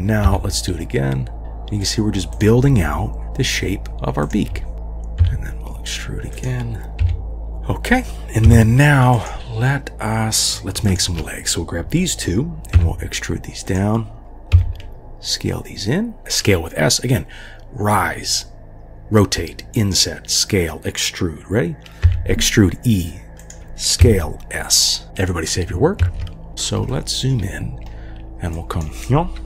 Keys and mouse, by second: 0.3 e, 1.4 g, 2.6 g, 3.2 g, 4.2 click, 4.5 g, 4.7 3, 5.2 e, 7.0 g, 8.5 3, 9.2 click, 10.9 shift+click, 12.8 e, 14.5 s, 16.2 g, 22.1 e, 24.0 s, 26.0 ctrl+s, 26.9 shift+click, 27.1 shift+middle drag, 28.7 click.